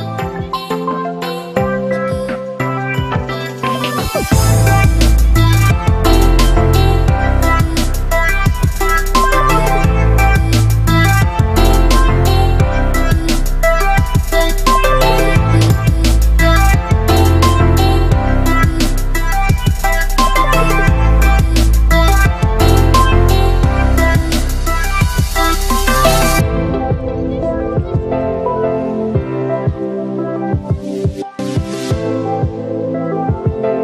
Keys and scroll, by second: 14.6 Down, 20.3 Up, 22.2 Down, 33.4 Up.